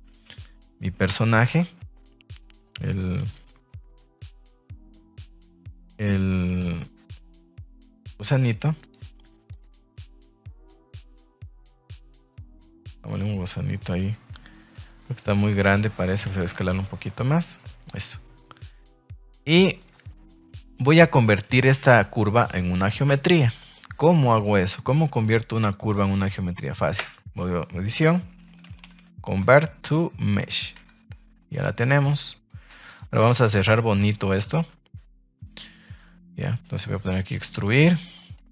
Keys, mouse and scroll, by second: 0.3 s, 0.8 \, 1.2 Escape, 1.7 alt+s, 2.8 Tab, 3.1 a, 3.3 a, 3.6-4.0 middle drag, 4.1 middle click, 6.0 Tab, 6.3 middle click, 6.5 r, 7.8 click, 8.0 Tab, 8.7 right click, 9.2 Tab, 9.4 right click, 10.0 alt+s, 10.6 click, 10.8 g, 12.5 Tab, 12.9-13.4 middle drag, 13.7 middle click, 14.3 Tab, 14.7 Tab, 15.2 s, 16.0 click, 16.2 a, 16.4 a, 16.6-16.9 middle drag, 17.1-17.4 middle drag, 17.5 shift+middle click, 17.8-18.6 middle drag, 18.8 shift+middle drag, 19.3-19.7 middle drag, 20.0 middle drag, 21.5 ctrl+s, 21.5-21.8 middle drag, 22.2 right click, 22.7-23.1 middle drag, 23.6 middle click, 23.9 middle click, 24.2 shift+middle click, 24.7 middle click, 25.1 shift+middle click, 26.1 ctrl+s, 26.9 space, 30.8 Tab, 31.0 middle click, 31.7 shift+middle click, 32.4 middle click, 32.7 Tab, 32.9 middle click, 33.4 Tab, 33.4 shift+middle click, 38.1 click.